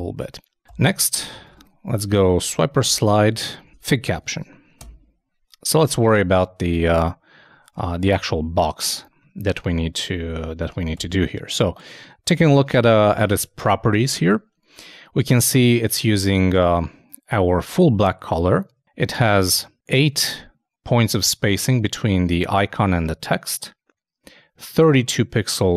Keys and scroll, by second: 3.5 shift+Return, 4.2 shift+space, 4.3 shift+[, 4.8 shift+Return, 6.9 super+Tab, 7.7 super+2, 10.9 super+., 11.6 super+space.